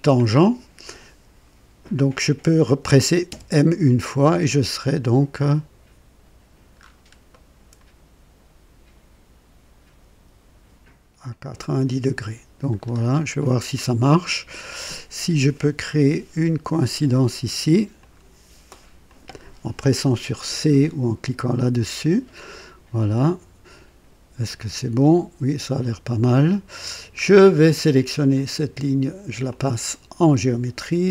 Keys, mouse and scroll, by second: 3.2 m, 6.8-7.2 scroll up 1, 7.3 right click, 11.2 click, 12.1 right click, 12.8 scroll up 2, 13.4 right click, 14.2 right click, 14.8 click, 17.9 click, 19.0 click, 21.5 c, 21.6 c, 24.4-26.9 drag, 27.2 scroll down 1, 28.3 click, 29.5 click.